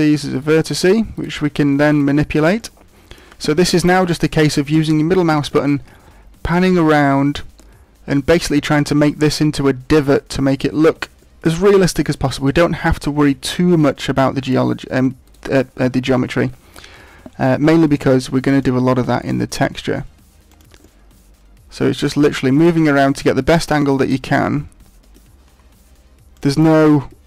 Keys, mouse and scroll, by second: 0.4 right click, 0.7 right click, 1.3 right click, 1.9 right click, 2.5 middle click, 5.5 middle click, 11.1 shift+middle click, 14.2 middle click, 14.4 shift+middle click, 15.2 right click, 17.4 g, 19.2 right click, 19.7 g, 20.5 click, 20.9 middle click, 22.5 right click, 22.9 g, 23.5 click, 24.0 right click, 24.4 middle click, 25.4 g, 26.4 click, 26.8 middle click.